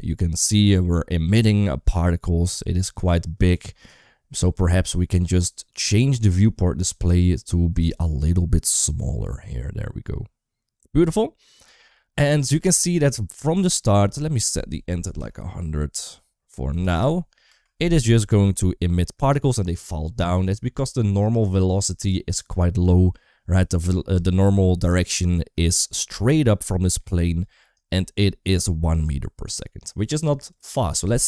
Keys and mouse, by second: 0.5 shift+middle click, 5.7 click, 6.0 click, 7.9-11.5 shift+drag, 12.2 space, 13.6 space, 14.1-16.8 drag, 17.3 space, 21.2 click, 23.9 space, 25.0 middle click, 26.1 d, 26.3 click, 27.3 d, 28.9 d, 30.7-31.2 drag.